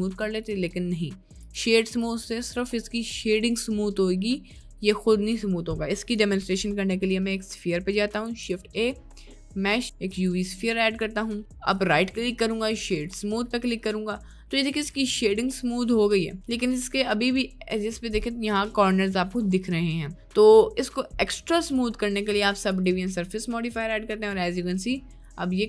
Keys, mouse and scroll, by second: 0.0 right click, 1.8 right click, 2.6-3.0 middle drag, 6.0 click, 6.3 Delete, 8.3 shift+a, 10.9-11.4 middle drag, 11.5 middle click, 12.0 right click, 14.1 middle drag, 14.7 middle click, 20.4-25.3 drag, 20.4-25.6 right drag, 25.3-25.6 middle drag.